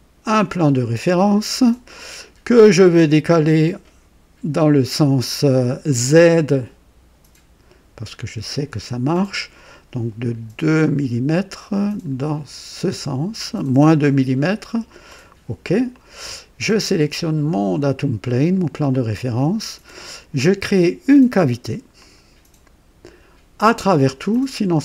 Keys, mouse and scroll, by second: 0.3 click, 2.1-3.5 drag, 8.4 click, 10.7 scroll up 2, 11.6-12.6 scroll down 5, 15.0 click, 15.9 click, 18.2 click, 18.9-19.7 drag, 21.9 click, 24.3 click.